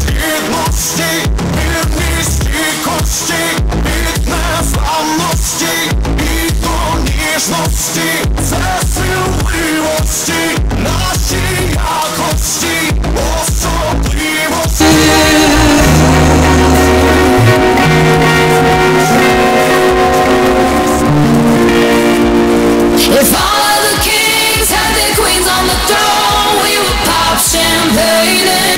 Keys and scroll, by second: 28.7 space.